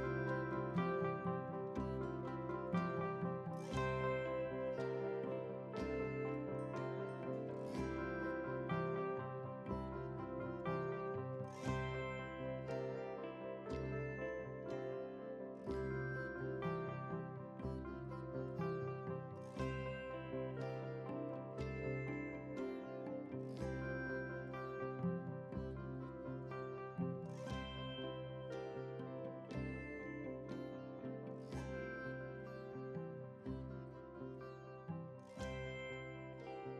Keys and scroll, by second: 21.4 ctrl+c, 22.0 ctrl+v, 25.5 F11, 26.3 F11.